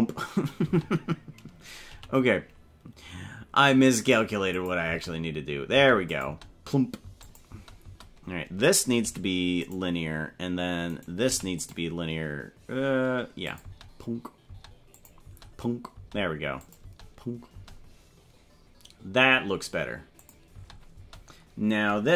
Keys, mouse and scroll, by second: 0.8 space, 1.9 g, 4.5 click, 4.8-9.0 typing, 6.1 click, 7.2 click, 10.9 right click, 11.3 t, 13.5 click, 13.6-17.5 typing, 14.9 click, 16.6 click, 20.2 click, 20.5 space, 21.0 space.